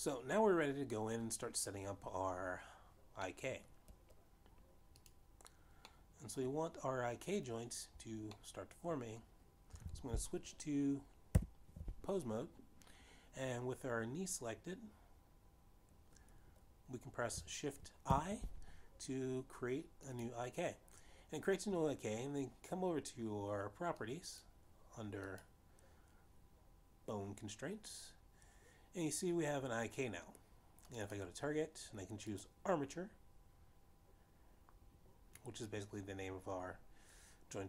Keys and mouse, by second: 0.3 shift+middle click, 0.9 middle click, 5.1 middle click, 6.7 click, 7.6 middle click, 10.2 middle click, 12.4 ctrl+alt+p, 20.1 shift+i, 21.5 click, 25.6 click, 32.7 click.